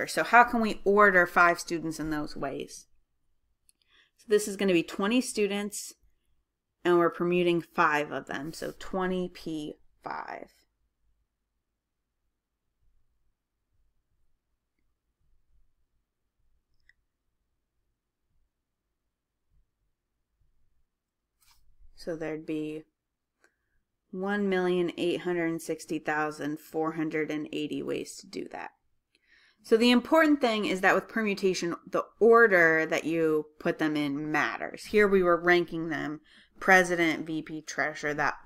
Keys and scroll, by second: 9.3-11.5 typing, 13.0 2, 13.9 0, 16.6 Left, 25.2-25.9 typing.